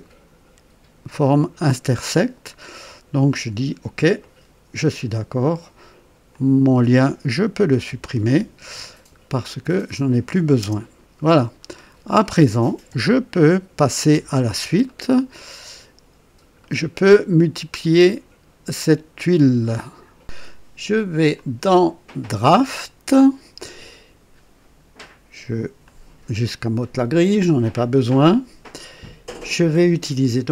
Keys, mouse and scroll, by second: 4.2 click, 6.3 click, 7.7 Delete, 9.2-10.1 scroll down 3, 10.6 KP_0, 10.6 KP_0, 11.5-12.4 scroll down 2, 12.9 KP_1, 14.1 KP_2, 14.8-16.3 right drag, 16.6-17.5 right drag, 20.2 click, 21.3 click, 22.6 click, 25.8 click, 27.9-29.0 right drag.